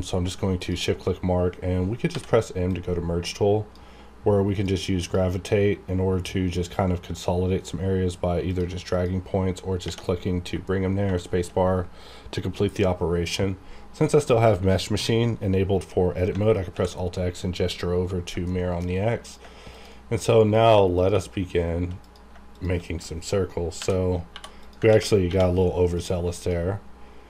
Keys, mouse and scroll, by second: 0.6 shift+click, 2.1 m, 2.7-8.5 drag, 10.7-11.0 scroll down 1, 11.2 shift+middle click, 16.7 alt+x, 18.5 shift+middle click, 19.2 click, 19.7 shift+click, 22.5 shift+click, 23.8 j, 24.3 j, 24.6 click, 24.9 ctrl+x, 25.3 1, 25.9 click, 26.4 shift+click.